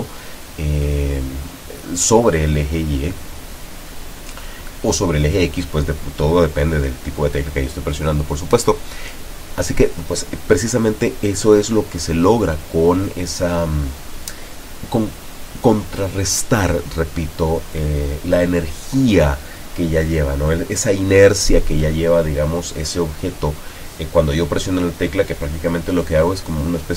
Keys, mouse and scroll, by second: 1.5 Up, 2.3 Left, 2.7 Up, 3.2 Down, 4.0 Left, 4.4 Down, 4.7 Right, 5.1 Down, 5.5 Up, 7.9 Escape, 9.5-10.2 drag, 10.9 click, 11.4 click, 12.5 click, 17.4 click, 18.6-19.3 drag, 26.3 p.